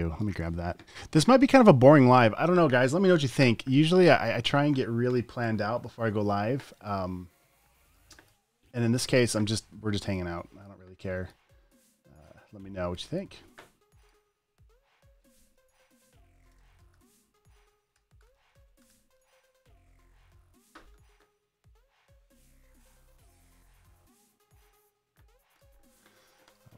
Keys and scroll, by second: 16.4-19.7 typing.